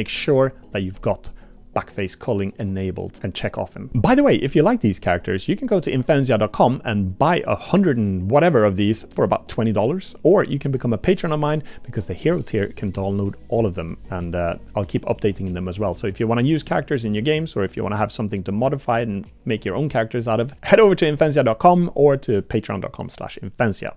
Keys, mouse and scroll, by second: 0.6 click, 1.3-3.2 drag, 7.3 middle click.